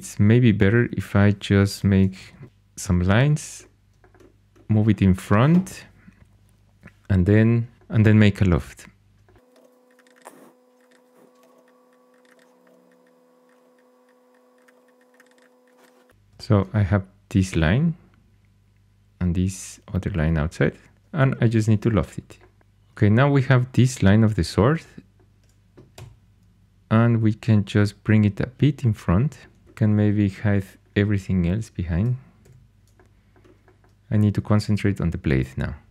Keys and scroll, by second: 0.8 shift+a, 1.6 Escape, 2.2 ctrl+super+c, 9.6 ctrl+super+c, 11.0-11.9 typing, 12.6 ctrl+super+c, 13.6 shift+a, 14.7 2, 21.4 2, 25.9 g, 32.4 h.